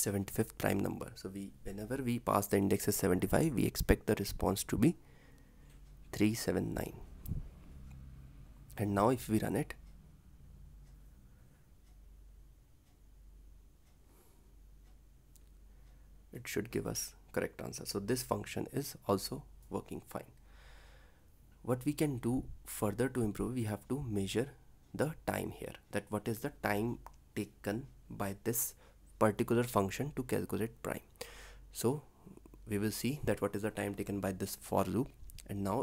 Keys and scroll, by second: 8.2 ctrl+s, 26.8 ctrl+c, 28.5 ctrl+v, 31.7 ctrl+c, 33.7 ctrl+v, 34.0 ctrl+s.